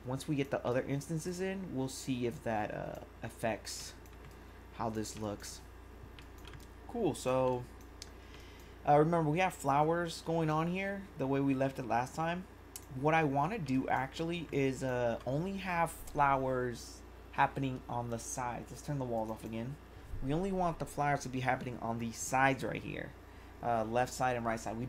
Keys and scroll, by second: 0.7 1, 13.7 1.